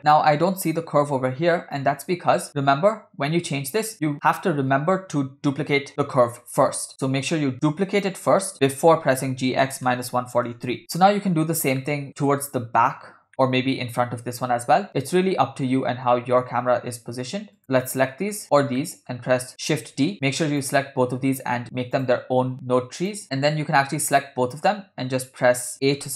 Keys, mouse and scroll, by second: 0.0 click, 2.5 click, 6.9 click, 7.9 click, 9.7 g, 11.8-12.2 middle drag, 13.3 scroll down 1, 13.3-13.6 middle drag, 15.0 shift+click, 15.2-15.6 scroll up 3, 15.6-16.1 scroll down 2, 17.6 shift+click, 17.9-18.4 middle drag, 18.6 shift+click, 18.8 middle drag, 19.8 shift+d, 20.7 click, 22.0 click, 23.0 click, 23.4-23.8 scroll up 3, 24.0-24.4 shift+middle drag.